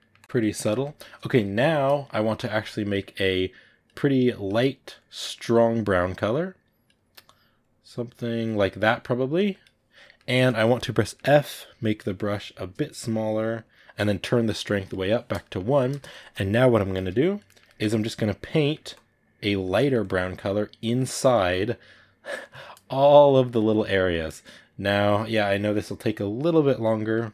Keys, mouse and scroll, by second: 0.1 click, 0.2-3.4 middle drag, 3.4 click, 9.9-12.1 ctrl+middle drag, 12.1 f, 14.7 click, 15.3-16.8 shift+middle drag, 16.8 f, 17.3 ctrl+middle click, 18.0 click, 18.5 ctrl+middle click, 18.8 click, 19.5 ctrl+middle click, 19.9 click, 20.8 middle click, 21.2-22.3 drag, 22.3 middle click, 22.8 click, 23.8 middle click, 24.3-25.7 drag, 25.7 middle click, 26.2 click, 26.9 ctrl+middle click.